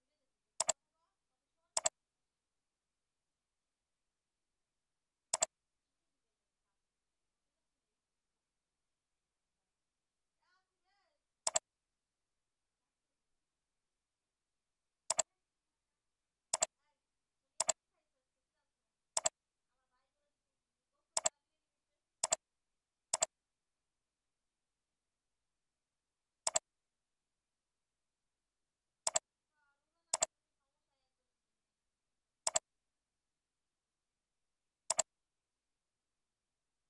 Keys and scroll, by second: 13.4 ctrl+b, 31.0 ctrl+b.